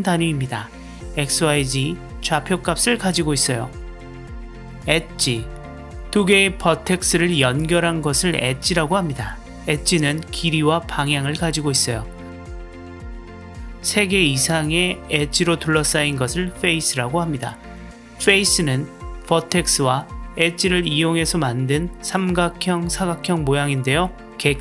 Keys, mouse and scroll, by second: 5.2 click, 6.2 drag, 7.2 click, 14.2 click, 17.5 click.